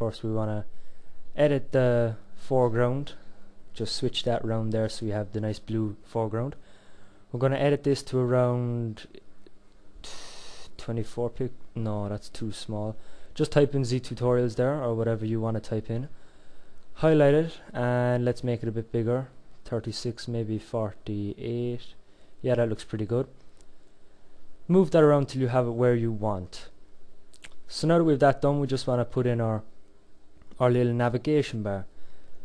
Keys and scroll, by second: 16.0 ctrl+a.